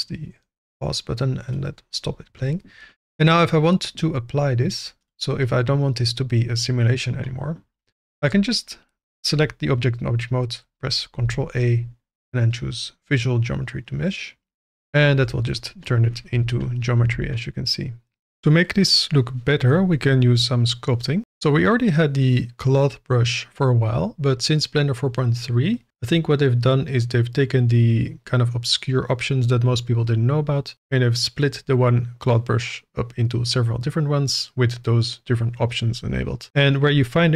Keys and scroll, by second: 11.2 ctrl+a, 15.1 Tab, 16.3 2, 17.8 alt+a.